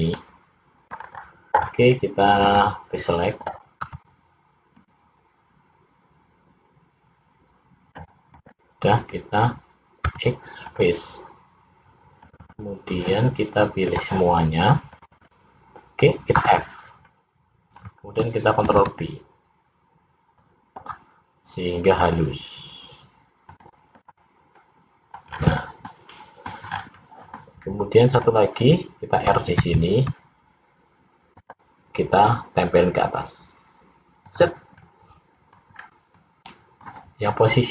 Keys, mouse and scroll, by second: 2.5 click, 3.9 c, 10.1 x, 12.3 click, 12.7 click, 14.0 click, 14.9 click, 15.4 click, 16.5 f, 17.1 middle click, 18.8 ctrl+b, 24.0 click, 24.7 middle click, 25.3-25.9 scroll down 3, 25.9 middle click, 26.7-27.4 scroll up 4, 27.4 middle click, 29.7 ctrl+r, 34.9 middle click, 35.9-36.3 scroll down 2, 36.3 middle click.